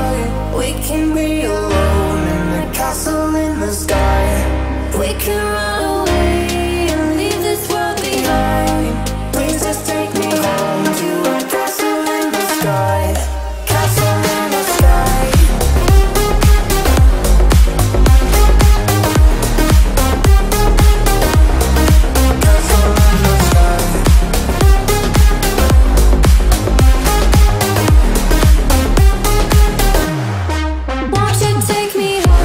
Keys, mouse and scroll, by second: 0.3 shift+middle click, 1.4 shift+e, 1.7 space, 1.9 scroll up 1, 2.2 shift+middle click, 3.8 b, 5.4 click, 10.3 scroll up 1, 10.6 click, 11.2 shift+middle click, 11.8 scroll down 1, 12.4 ctrl+z, 13.5-16.6 drag, 16.6-17.0 scroll up 1, 17.0 space, 18.0 click, 21.3-32.4 drag.